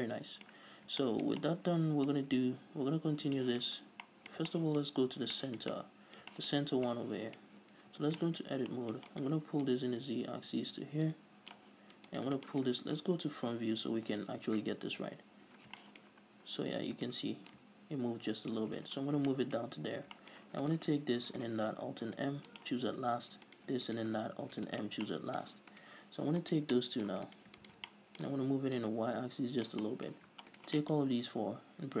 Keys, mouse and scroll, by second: 1.1 scroll down 2, 4.2 scroll down 2, 5.3 scroll up 2, 5.6 scroll down 2, 7.0 scroll up 2, 7.9 scroll up 1, 8.3 Tab, 8.8 scroll up 1, 9.5 right click, 10.0-12.5 drag, 12.5 right click, 12.8-17.4 middle drag, 15.4 KP_1, 16.5-17.4 scroll up 2, 17.4 right click, 17.7 middle click, 17.9-19.7 drag, 19.2-19.7 scroll down 2, 19.7-21.0 shift+middle drag, 20.2 scroll up 2, 21.0 right click, 21.7 shift+right click, 22.5 alt+m, 23.9 right click, 24.3 shift+right click, 24.9 alt+m, 25.5 middle click, 26.1 right click, 26.4 scroll up 1, 26.8 alt+right click, 27.1 middle click, 27.7 right click, 28.3 middle click, 29.2-30.2 drag, 30.2 middle click, 30.9 shift+right click, 31.2 shift+right click, 31.7-32.0 scroll down 2.